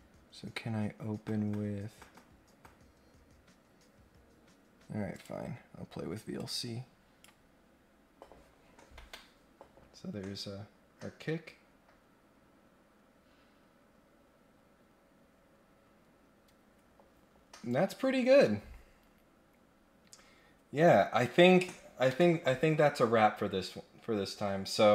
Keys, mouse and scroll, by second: 5.1 click, 6.3 click.